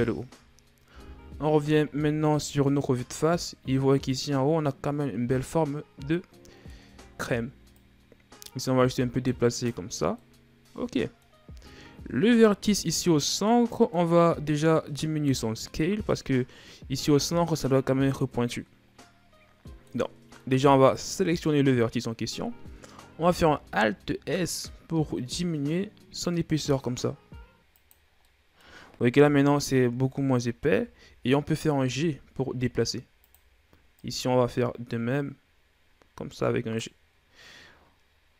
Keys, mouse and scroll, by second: 0.8 KP_1, 1.8 Tab, 2.2 a, 2.7-3.1 scroll down 4, 3.1-4.1 middle drag, 4.1-5.0 scroll up 4, 5.9 scroll up 1, 6.0 middle click, 6.7 Tab, 7.5 right click, 9.9-11.3 middle drag, 11.3-12.2 scroll up 2, 12.2 right click, 12.9-21.0 middle drag, 21.0-22.5 scroll up 2, 22.5-23.1 scroll up 1, 23.1 alt+s, 27.8 scroll down 4, 28.0 middle click, 29.0 KP_7, 30.0-30.6 scroll up 3, 30.6-31.0 shift+scroll down 2, 31.0-31.6 scroll up 2, 31.6 g, 33.8 right click.